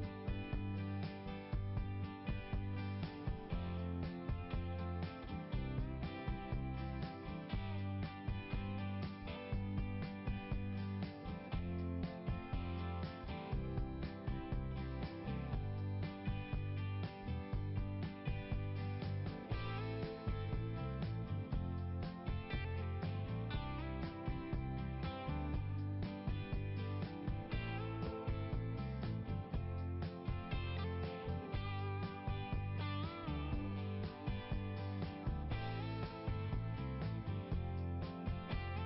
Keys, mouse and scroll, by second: 0.4 click, 1.0 scroll down 1, 3.6 click, 4.0-5.0 scroll down 1, 5.0 click, 6.8-8.1 scroll down 1, 8.9 click, 9.9 click, 16.9 click, 17.7 click, 18.8 click, 22.0 click, 22.9 scroll up 1, 24.5 click, 26.1 click, 27.7 click, 28.7 click, 31.1 click, 33.0 click, 34.7 click, 37.0 click, 37.4 click, 37.7 click, 38.0 click, 38.4 click.